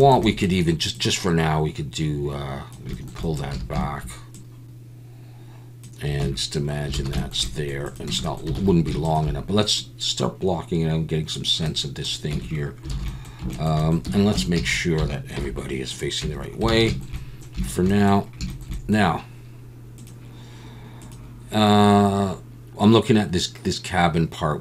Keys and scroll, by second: 3.5 a, 6.2 Tab, 7.0 alt+a, 8.1 Tab, 8.6 alt+a, 12.3 Tab, 12.9 alt+a, 14.0 a, 14.3 Tab, 14.6 a, 15.4 alt+n, 16.2 Tab, 16.7 alt+a.